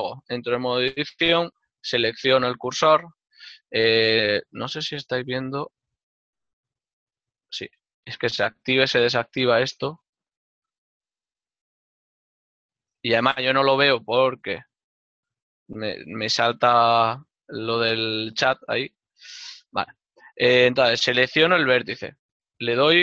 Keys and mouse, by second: 0.3 click, 2.3 right click, 13.8 click, 19.6 click, 22.5 a.